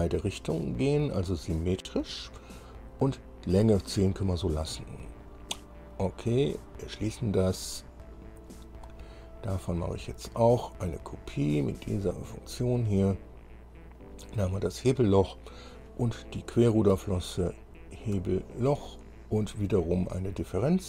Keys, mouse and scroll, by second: 1.6 click, 2.6-5.0 middle drag, 6.6 click, 8.2 scroll down 1, 8.6-9.0 scroll up 2, 9.0-9.6 scroll down 2, 9.8 click, 12.2 click, 13.1-13.4 scroll down 2, 14.2 click, 16.6 click, 17.8 ctrl+click, 20.6 click.